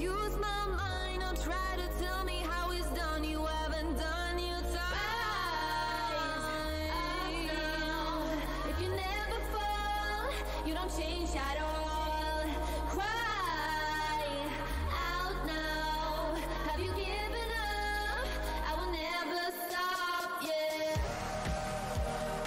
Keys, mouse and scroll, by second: 1.0-2.0 typing, 2.6 click, 5.6 w, 7.6 click, 7.6 alt+click, 9.7 alt+click, 10.2-11.0 typing, 11.1 click, 11.9 alt+click, 12.9 right click, 13.2 click, 17.1 shift+click, 17.7 alt+click, 18.9 ctrl+shift+click, 21.5 alt+scroll up 1.